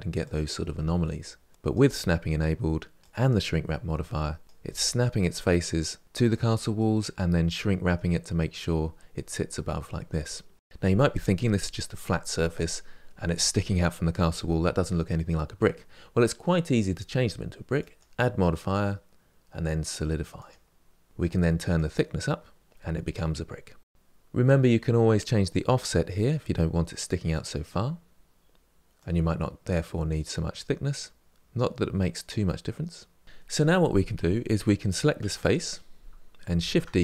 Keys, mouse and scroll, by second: 0.0 click, 0.4 g, 1.6 middle click, 2.1 click, 2.5 g, 4.1 middle click, 4.7 click, 5.2 g, 7.7-9.9 middle drag, 10.7 middle click, 20.2 click, 21.5-22.7 drag, 25.2-27.9 drag, 28.8-31.8 drag, 34.9 3, 35.2 click, 36.5 shift+d.